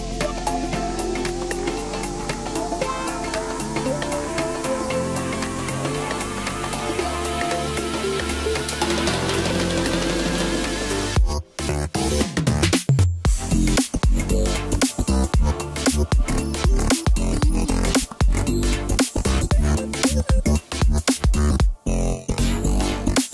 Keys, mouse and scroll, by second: 0.3-1.2 scroll down 1, 1.2-2.8 middle drag, 2.8-3.3 scroll up 3, 3.3 scroll down 1, 3.5-5.2 middle drag, 5.2 scroll up 1, 6.2 e, 9.1-9.4 scroll up 1, 9.4 scroll down 2, 9.7-11.0 middle drag, 11.0-12.4 scroll up 1, 14.7 KP_1, 15.7 scroll up 1, 16.5 scroll up 1, 17.6-17.9 scroll down 1, 17.9-19.1 middle drag, 19.1-19.8 scroll down 4, 19.8-20.4 middle drag, 20.4-20.9 scroll up 2, 21.4 e.